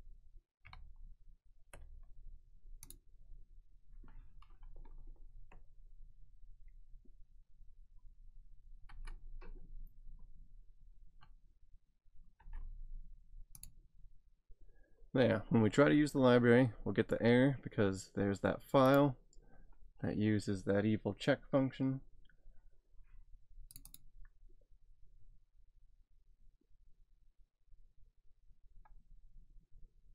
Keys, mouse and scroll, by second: 2.9 click, 8.9 alt+Tab, 12.4 alt+Tab, 13.6 click, 18.9 click, 23.7 click.